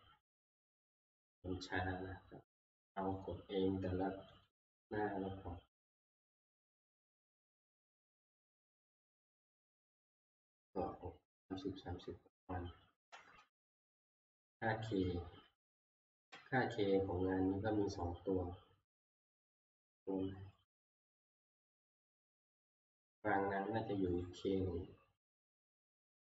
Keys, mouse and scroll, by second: 1.0 ctrl+Page_Up, 1.0 click, 2.0 click, 2.8 click, 3.3 click, 4.5 click, 8.4-9.5 drag, 13.1 click, 13.4 ctrl+Page_Up, 16.1 ctrl+Page_Up, 18.1 scroll, 20.7 click, 21.2 scroll down 1, 22.4 click, 22.9 click, 24.2 click.